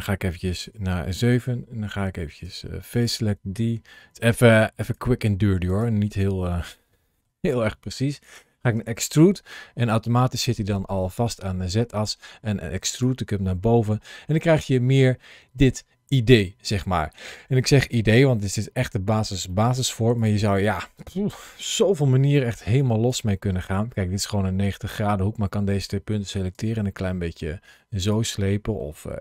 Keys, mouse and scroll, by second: 0.5 KP_7, 2.3 3, 2.8 click, 4.7 shift+click, 5.5 shift+click, 6.1 middle click, 8.6 e, 12.8 click, 13.3 middle click, 17.5 scroll down 1, 18.2-18.8 scroll down 1, 18.8 scroll up 1, 19.3 middle click, 20.0 click, 20.5 click, 22.1 1, 22.3 click, 22.6 click, 23.9 middle click, 25.2-26.4 scroll up 1, 26.4 g, 27.9 click, 28.2 middle click, 28.8 g.